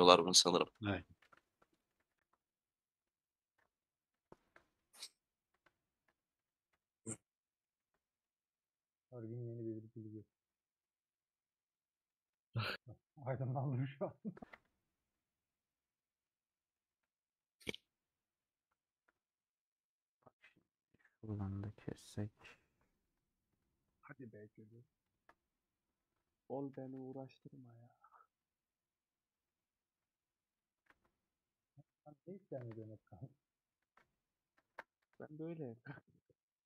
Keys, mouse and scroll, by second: 0.3 click, 1.1 /, 1.6 middle click, 2.1 Tab, 2.3-4.3 drag, 4.3 ;, 4.9 3, 5.0 click, 5.6 ctrl+KP_Add, 6.8 ;, 7.2 middle click, 7.7 2, 8.7-10.1 middle drag, 10.1 scroll up 1, 10.3 3, 10.5-12.8 middle drag, 12.8 alt+click, 13.5 alt+click, 14.6 ;, 15.0 scroll down 2, 15.1-16.9 middle drag, 18.4 middle click, 19.1 scroll up 2, 19.6-21.2 middle drag, 21.2 click, 23.5 alt+click, 24.9 click, 25.9 middle click, 26.8 2, 28.3 alt+Left, 29.4-32.5 middle drag, 32.5 alt+z, 32.8-33.8 middle drag, 33.8 alt+z, 34.1 middle click, 34.8 2, 36.2 alt+Left.